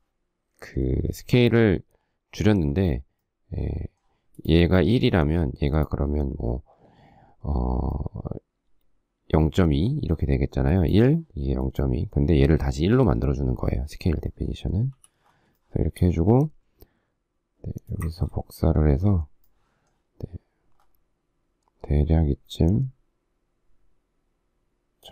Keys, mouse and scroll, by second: 4.3 click, 5.6 click, 10.6 click, 11.5 click, 15.1 m, 15.5 shift+middle click, 19.4 shift+middle click, 20.8 shift+scroll, 25.0 shift+click.